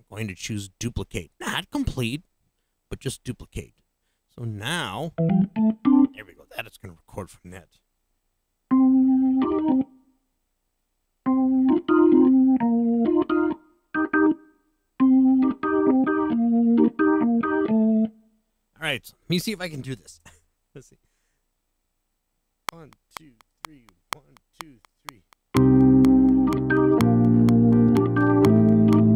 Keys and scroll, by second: 20.0 0, 22.6 *.